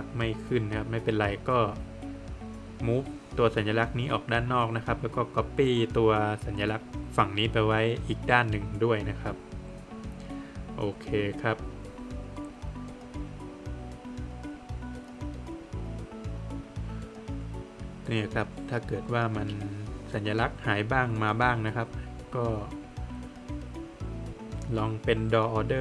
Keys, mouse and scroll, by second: 0.7 middle click, 0.9 Escape, 1.0 scroll up 1, 1.4 click, 1.7 double click, 2.0 middle click, 2.6 space, 3.1 click, 4.2 Escape, 4.6 click, 5.0 double click, 5.3 scroll down 1, 6.6 space, 7.1 click, 7.3 scroll down 1, 7.5 middle click, 8.2-9.3 scroll up 1, 9.3 click, 9.5 Escape, 10.4 click, 11.6 scroll down 1, 11.7 middle click, 12.2-12.5 scroll up 1, 12.6 Escape, 13.8 space, 14.3-14.7 scroll down 1, 14.9 middle click, 15.3 Escape, 15.7 scroll up 1, 16.2 middle click, 17.4 click, 17.7 double click, 18.2 click, 18.5 double click, 18.7 scroll down 1, 19.1 middle click, 19.6 click, 20.1 double click, 21.3 right click, 25.4 click.